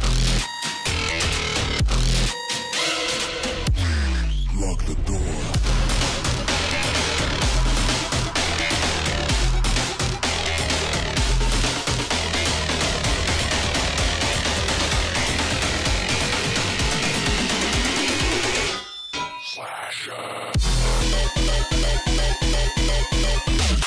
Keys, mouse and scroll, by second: 1.5 alt+scroll up 1, 2.0-6.4 alt+drag, 6.4 alt+scroll up 1, 6.7 alt+scroll down 1, 6.9 space, 7.0 click, 7.4 Up, 8.6 click, 9.4-9.9 alt+scroll down 1, 9.9 alt+scroll up 1, 11.1-12.7 drag, 13.9 right click, 14.5 click, 16.3 click, 16.4 right click, 17.5 click, 17.9 click, 18.0-18.5 alt+scroll down 1, 18.5 alt+scroll up 1, 18.8 click, 21.2-21.8 alt+scroll up 1, 22.1 alt+scroll down 1, 22.3 space, 22.3 click, 22.6 space.